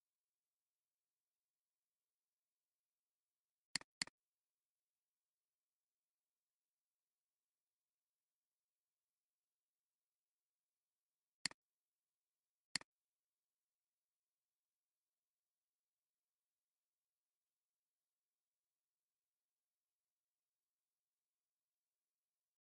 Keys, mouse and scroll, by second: 3.9 double click, 9.7 click, 11.4 click.